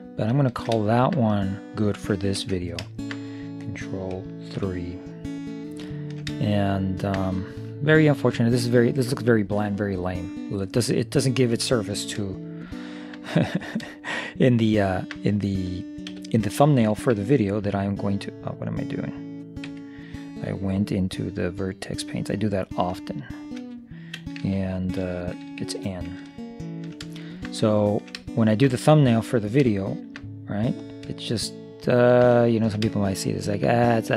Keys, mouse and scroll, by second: 2.5 ctrl+s, 4.6 ctrl+KP_3, 5.8-9.2 middle drag, 12.6-14.4 middle drag, 13.8-15.6 drag, 16.2 t, 17.7 v, 19.8 Escape, 21.6 click, 25.8 n, 26.4-27.4 middle drag, 30.0 middle click, 30.9-32.9 drag, 32.9-34.1 middle drag.